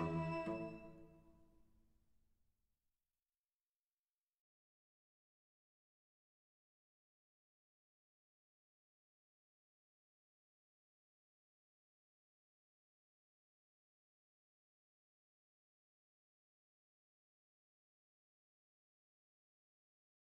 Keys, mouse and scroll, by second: 0.5-1.7 middle drag, 1.7 right click, 1.9-3.0 middle drag, 3.0-4.9 right drag, 4.9-7.7 middle drag, 7.0-17.0 right drag, 10.2-13.0 drag, 10.2 middle click, 14.8-16.4 drag, 16.4 middle click, 17.5-20.3 right drag.